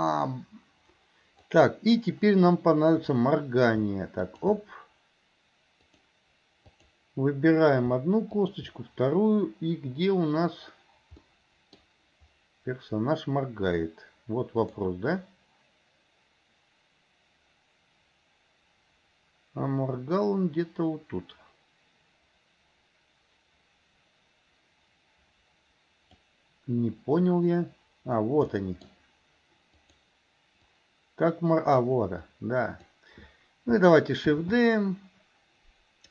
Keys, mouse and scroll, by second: 4.2 shift+click, 5.9 click, 6.7 click, 8.3 shift+click, 11.3-11.9 middle drag, 14.7 click, 15.3-26.3 drag, 28.7 middle click, 29.9 click, 30.8 click, 32.4-32.9 drag, 34.4 shift+d.